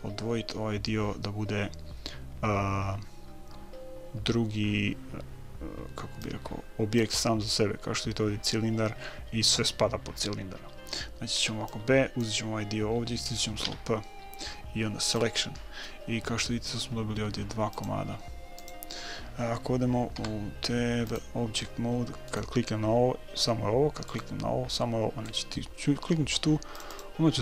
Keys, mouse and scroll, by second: 6.6-8.5 drag, 11.9 b, 14.0 p, 18.1 click, 20.5 Tab, 21.5 Tab, 22.7-27.4 right drag, 27.1-27.4 drag.